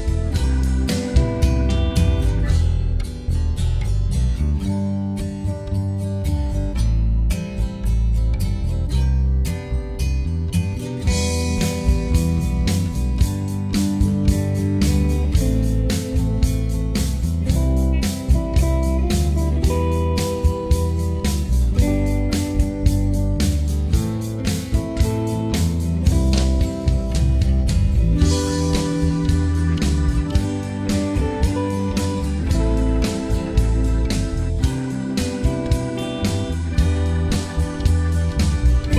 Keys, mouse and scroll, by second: 0.1 scroll down 1, 0.2 alt+middle click, 1.0-2.7 drag, 2.7 alt+middle click, 2.8 scroll up 1, 2.9 alt+middle click, 3.2 f, 3.4-4.7 drag, 4.7 alt+middle click, 4.9 click, 5.7 alt+middle click, 6.2 click, 7.0 alt+middle click, 7.1 click, 7.8 alt+middle click, 8.1 scroll down 1, 8.2 alt+middle click, 8.4 shift+right click, 8.8 scroll up 1, 8.9 alt+middle click, 9.2 right click, 9.5 f, 9.6 click, 11.5 alt+middle click, 11.6 alt+click, 11.9 alt+middle click, 12.1 right click, 12.6 alt+middle click, 12.7 alt+click, 12.9 alt+middle click, 13.2-15.4 drag, 15.4 alt+middle click, 15.5-16.7 drag, 16.7 alt+middle click, 16.9 alt+click, 17.0 alt+middle click, 17.2 click, 18.5 alt+click, 19.1 alt+middle click, 19.3 click, 19.8-20.3 scroll down 3, 20.0 alt+middle click, 20.1 alt+click, 20.3 alt+click, 20.7 alt+middle click, 20.7 alt+click, 21.0 alt+middle click, 21.1 alt+click, 21.2 right click, 21.7 alt+middle click, 21.8 alt+click, 22.1 alt+middle click, 22.2 alt+click, 22.5 alt+middle click, 23.0 alt+click, 23.2 alt+middle click, 23.6-25.4 drag, 25.4 alt+middle click, 25.6 alt+click, 25.7 alt+middle click, 25.9 click, 26.8 alt+middle click, 26.9 click, 27.3 alt+middle click, 27.5 click, 27.8 alt+middle click, 27.9 alt+click, 28.7 alt+middle click, 28.8 click, 29.0 alt+middle click, 29.2 click, 29.7 alt+middle click, 30.1 click, 30.4 alt+middle click, 30.5 click, 31.0 alt+middle click, 31.1 alt+click, 31.2 right click, 31.3 alt+click, 31.5 scroll down 2, 31.5 alt+middle click, 31.7 alt+click, 31.9 alt+middle click, 32.1 alt+click, 32.4 alt+middle click, 32.6 alt+click, 32.9 alt+middle click, 33.3 alt+click, 33.4 alt+middle click, 33.4 scroll up 6, 33.6 f, 33.8 alt+middle click, 34.0 shift+click, 34.3 alt+middle click, 34.4 alt+shift+click, 34.8 scroll down 1, 35.1 shift+click, 35.3 alt+middle click, 35.4 shift+click, 35.7 alt+middle click, 35.8 right click, 36.4 f, 36.5 f, 36.6 click, 37.1 alt+middle click, 37.3 click, 37.4 alt+middle click, 37.7 scroll down 2, 37.8 alt+middle click, 37.9 alt+click, 38.2 right click, 38.3 alt+middle click, 38.5 right click, 38.7 scroll up 1, 38.8 alt+middle click.